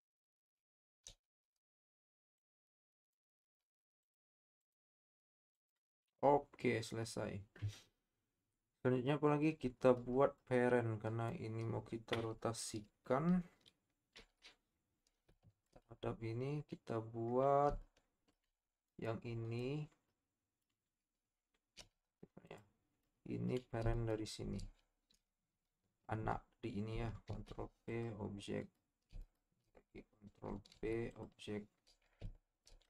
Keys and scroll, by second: 1.0 shift+s, 3.4 Tab, 22.0 z, 27.3 ctrl+p, 30.7 ctrl+p.